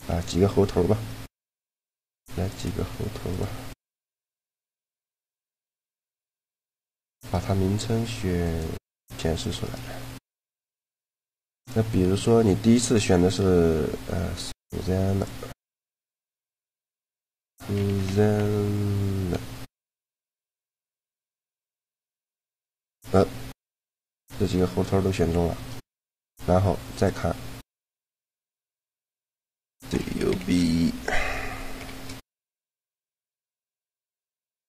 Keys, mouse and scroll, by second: 0.0 shift+a, 1.8-3.6 drag, 2.7 shift+d, 3.6 shift+d, 3.7 click, 3.7 right click, 5.3 b, 6.1-8.8 right drag, 8.9 a, 9.5-10.9 right drag, 9.7 g, 10.6 g, 10.9-12.3 drag, 12.0 a, 14.9 a, 18.1 n, 23.9-25.9 middle drag, 27.6 click.